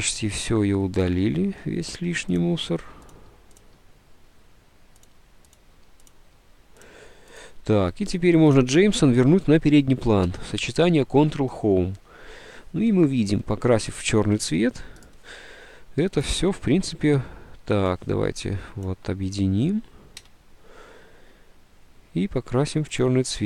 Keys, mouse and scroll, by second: 1.8 Delete, 2.8 Delete, 3.7 Delete, 5.7 Delete, 5.8 Delete, 6.8 Delete, 7.0 Delete, 7.6 Delete, 9.5 Delete, 10.3 ctrl+Home, 20.3 d.